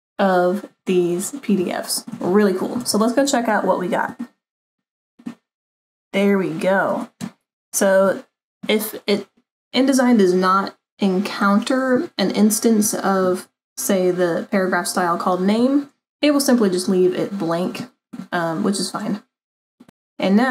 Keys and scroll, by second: 3.0 super+-.